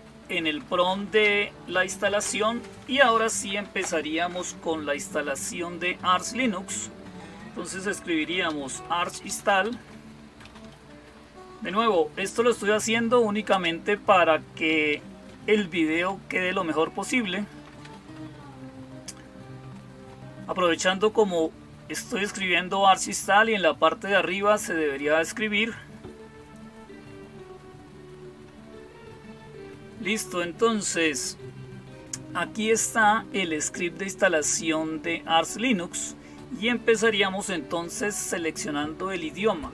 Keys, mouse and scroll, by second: 7.6-11.0 typing, 13.4 Return.